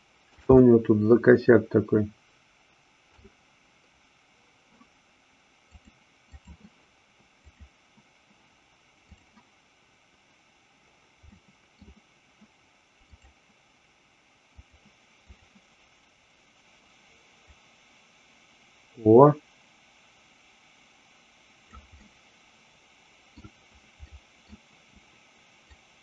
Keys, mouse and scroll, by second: 0.6-3.1 middle drag, 5.8 click, 11.4 middle click, 13.1-15.5 drag, 17.5-21.8 drag, 21.9-23.2 middle drag, 24.0 middle click, 25.6-26.0 drag.